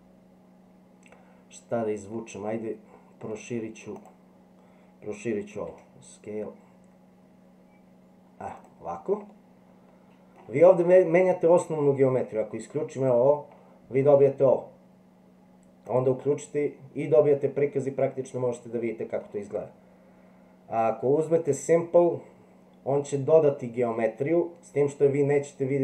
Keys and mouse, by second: 2.2-3.3 middle drag, 4.0 click, 5.7 s, 9.3-10.4 middle drag, 13.0 click, 15.9 click, 18.0-19.2 middle drag, 21.4 click.